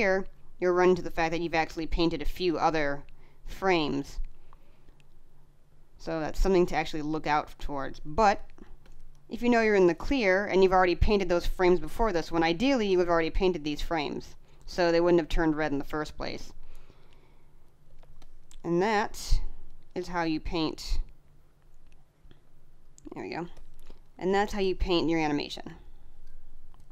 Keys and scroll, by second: 8.0 space, 17.8 space, 23.2 space.